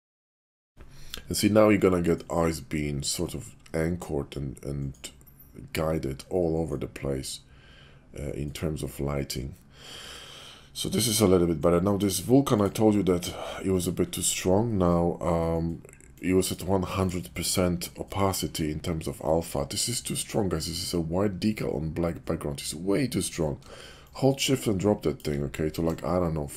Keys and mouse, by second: 12.5 click, 16.2 click, 16.9 click, 24.0-25.1 shift+drag.